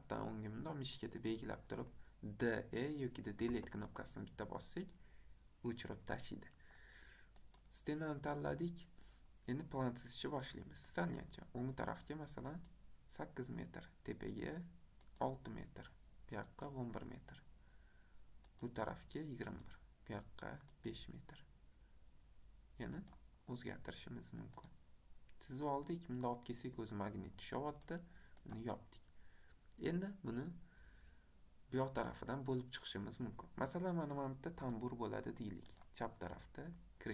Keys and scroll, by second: 3.1-3.9 typing.